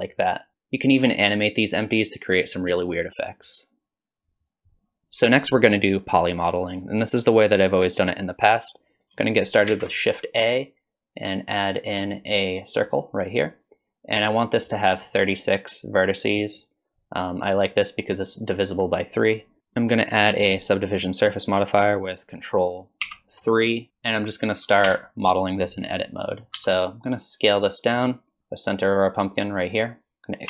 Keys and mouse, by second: 9.7 shift+a, 23.0 ctrl+3, 24.9 Tab, 26.6 s, 28.4 KP_1, 28.8-30.1 drag.